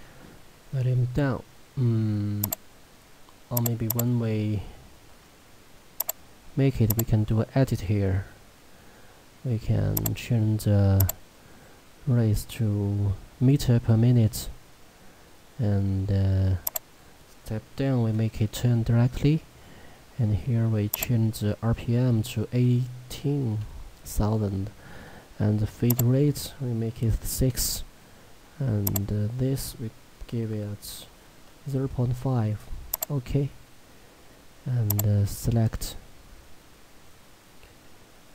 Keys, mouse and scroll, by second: 1.3-2.5 scroll up 1, 2.5 click, 5.3-6.1 scroll down 1, 6.1 click, 10.0 click, 16.7 click, 20.9 click, 25.9 click, 33.0 click.